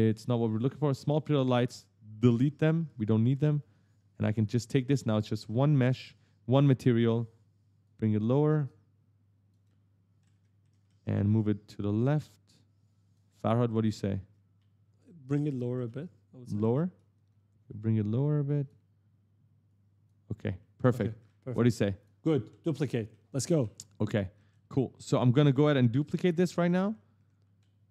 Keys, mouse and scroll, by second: 0.4 click, 0.7 click, 1.3 shift+click, 2.1 Delete, 2.7 right click, 3.9 click, 4.2 right click, 7.6 click, 9.4 right click, 11.9 click, 13.1 right click, 14.4 right click, 14.8 right click, 15.0-17.0 typing, 15.1 right click, 15.2 right click, 16.4 right click, 16.6 right click, 17.4 click, 19.5 click, 20.0-27.9 typing, 20.6 right click, 21.0 right click, 21.5 right click, 21.8 click, 22.1 right click, 22.3 right click, 22.9 right click, 24.3 right click, 25.1 click, 25.3 right click, 26.1 right click, 26.3 right click, 26.5 right click, 27.1 right click, 27.4 right click.